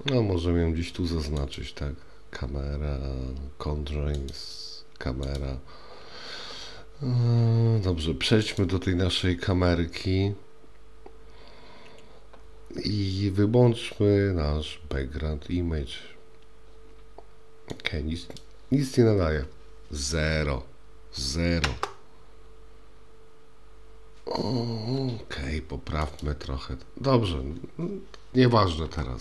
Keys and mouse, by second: 1.4 click, 4.2 click, 5.3 click, 8.6 click, 17.7-18.5 drag, 21.7 KP_0, 26.2 click.